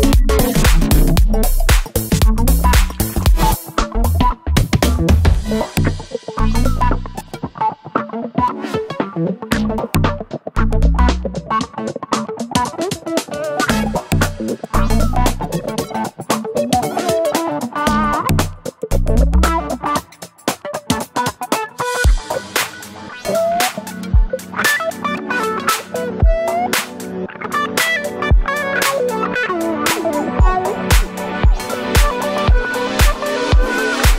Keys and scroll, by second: 29.3 Right, 29.4 Right, 31.0 Up, 31.1 Up, 31.3 Up, 33.6 d.